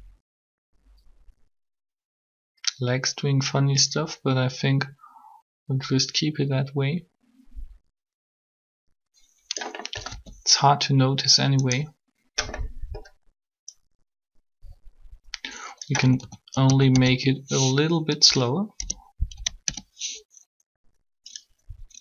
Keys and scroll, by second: 10.0 alt+a, 16.0-17.1 typing, 18.2-19.6 typing.